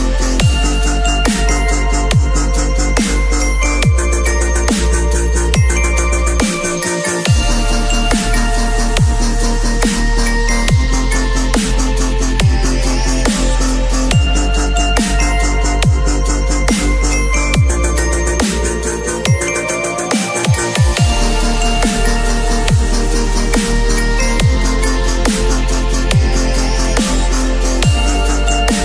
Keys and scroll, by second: 0.6 [, 6.3 x, 7.0 [, 9.6 x, 11.1 x, 12.3 x, 13.9 v, 15.7 b, 16.4 x, 24.3 v, 27.0 j.